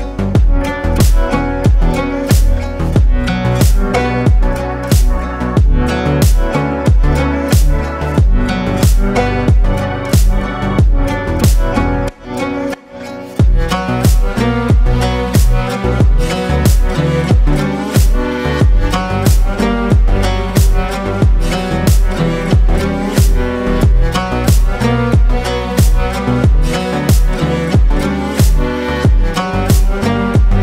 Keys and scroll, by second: 11.1 ctrl+space, 12.5 ctrl+space, 13.6 ctrl+space, 19.3 ctrl+g, 21.5 ctrl+space, 28.0 ctrl+space.